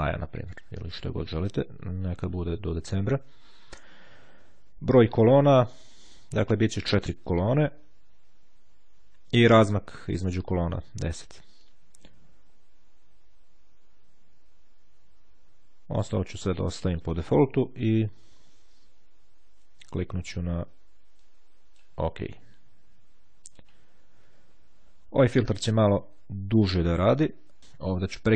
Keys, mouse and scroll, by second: 1.0 click, 2.4 click, 21.3-22.4 drag, 22.8-24.2 drag.